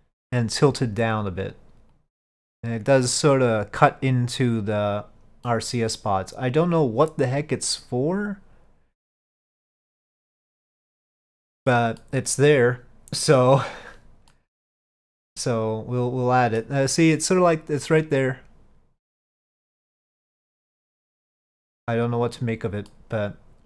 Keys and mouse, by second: 2.1-5.0 drag, 5.5-11.8 middle drag, 12.1-13.5 middle drag, 14.4-16.8 middle drag, 23.0-23.6 middle drag.